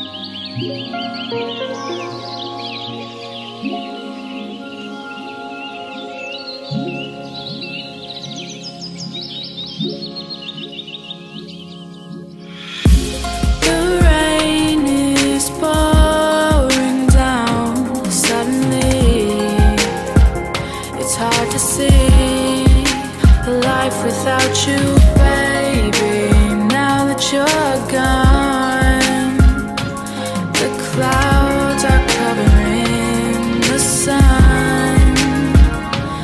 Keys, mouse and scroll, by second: 0.0-1.3 typing, 2.6 click, 2.8-4.8 typing, 5.3-11.9 drag, 12.1 F10, 13.7 click, 14.3 ctrl+c, 14.5 ctrl+v, 15.2-18.2 drag, 19.7 F10, 20.3 click, 21.2 right click, 23.9 click, 26.2-28.3 typing, 29.0 click, 31.5-32.4 typing, 33.3 click, 33.5-35.3 typing, 35.9 click.